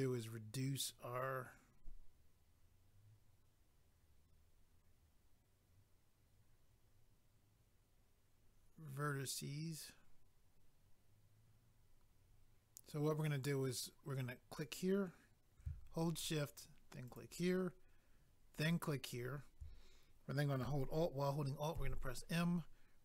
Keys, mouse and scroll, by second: 14.5 click, 14.6 click, 17.1 shift+click, 18.5 shift+click, 21.7 alt+m.